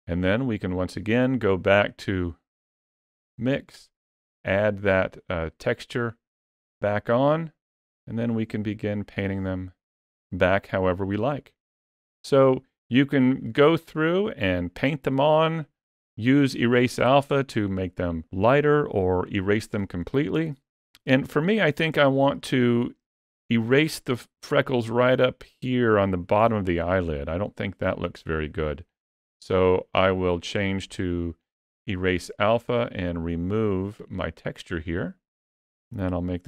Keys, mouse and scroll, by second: 0.7 click, 3.3 click, 8.1 click, 9.1 click, 10.2 click, 11.6 click, 14.1 middle click, 19.6 middle click, 20.9 ctrl+middle click, 21.9 shift+middle click, 22.4 middle click, 23.1 ctrl+middle click, 30.0 click, 32.6 click, 35.6 f.